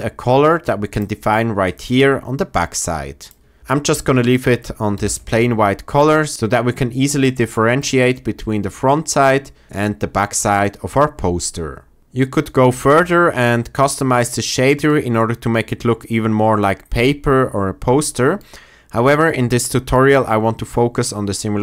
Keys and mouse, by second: 0.9 click, 4.9 ctrl+z, 16.6-18.5 drag.